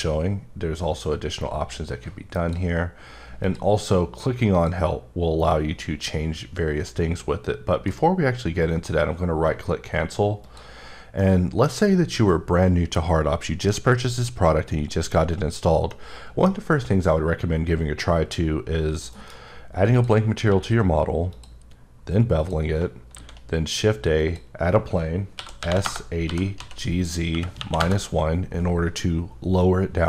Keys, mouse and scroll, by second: 1.3-2.6 drag, 3.5 click, 4.7 click, 8.0 right click, 8.9-9.5 scroll down 1, 9.5-10.0 scroll down 2, 10.4 click, 11.2 middle click, 15.9 middle click, 19.1 m, 19.9 click, 20.5 q, 21.3 click, 21.8 scroll up 4, 22.5 click, 23.1 shift+a, 24.2 click, 25.4-27.6 typing, 25.8 KP_Enter, 27.3 KP_Subtract, 27.8 KP_Enter.